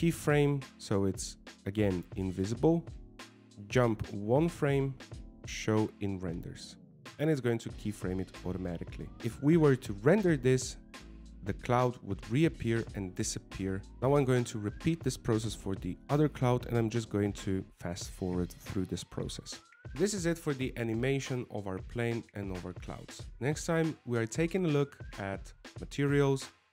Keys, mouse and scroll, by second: 1.8 click, 5.5 click, 7.1 click, 9.8 click.